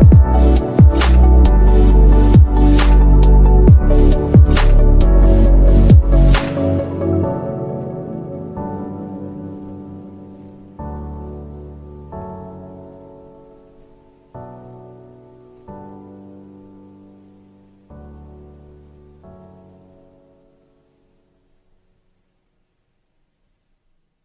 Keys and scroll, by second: 13.7 shift+F2, 14.5 Escape, 17.0-17.9 typing, 18.2 Return, 18.9 o, 20.0 Caps_Lock, 20.1 BackSpace, 20.5 o.